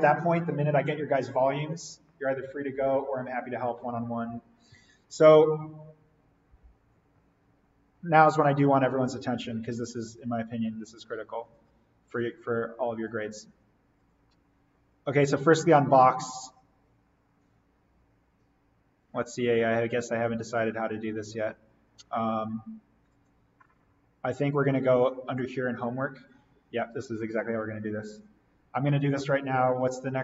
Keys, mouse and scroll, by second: 11.5 click, 14.3 click, 20.1 click, 23.1 click, 29.8 click.